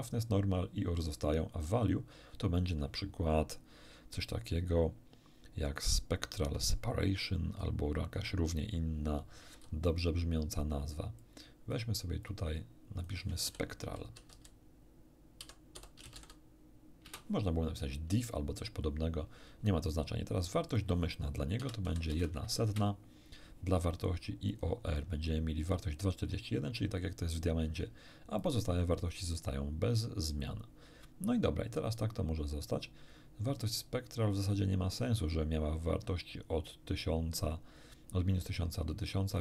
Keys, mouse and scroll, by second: 1.5 click, 9.5 n, 11.2 click, 12.2 click, 13.0 click, 13.4 shift+s, 14.2 shift+p, 14.3 shift+e, 15.4-16.2 typing, 17.0 Return, 20.7 click, 21.6 0, 21.8 ., 22.1 0, 22.6 Return, 22.6 1, 24.5 click, 28.4 click, 29.0 click, 30.0 click, 30.4 click, 39.3 click.